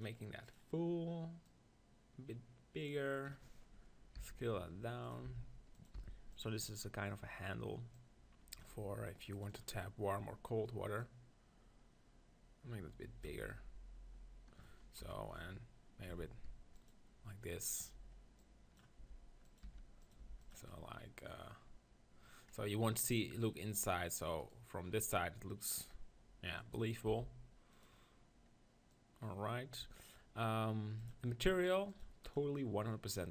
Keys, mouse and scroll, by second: 4.2 s, 5.1 click, 5.2 g, 6.0 s, 8.6-12.9 drag, 15.0 KP_1, 16.1 r, 16.9-22.4 drag, 19.0 g, 19.7 r, 20.2 g, 20.7-25.1 middle drag, 24.4 click, 27.1 s, 28.9-33.3 drag.